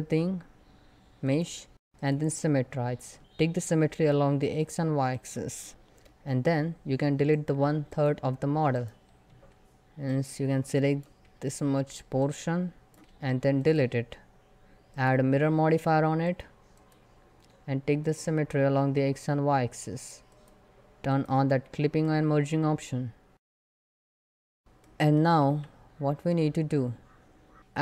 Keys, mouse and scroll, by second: 0.9 click, 3.0 a, 3.7 click, 5.1 shift+middle click, 5.3 click, 5.5-7.0 middle drag, 7.0 click, 9.0 3, 9.7-13.0 drag, 13.0 x, 13.2 click, 21.7-23.3 middle drag, 23.3 click, 23.5 middle click, 24.0 scroll up 1, 24.1 middle click, 25.2 1, 25.6 scroll down 1, 26.0-27.6 middle drag.